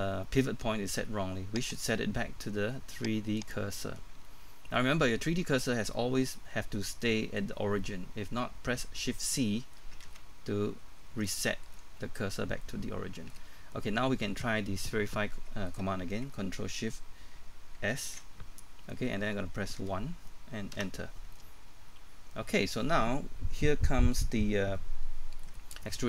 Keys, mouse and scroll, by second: 1.8 click, 4.0-4.3 scroll down 1, 4.3 middle click, 10.8-11.2 scroll up 1, 10.8 shift+c, 17.9 ctrl+shift+s, 19.8 1, 20.7 Return, 21.1 scroll down 1, 21.3 middle click, 25.6 scroll up 1, 25.8 middle click.